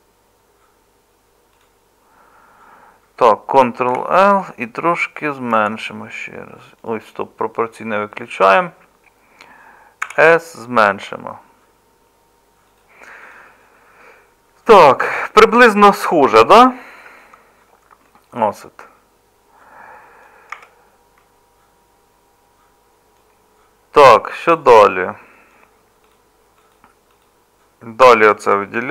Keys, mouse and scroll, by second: 4.0 ctrl+l, 5.5 s, 10.0 s, 20.5 Tab, 28.0 Tab.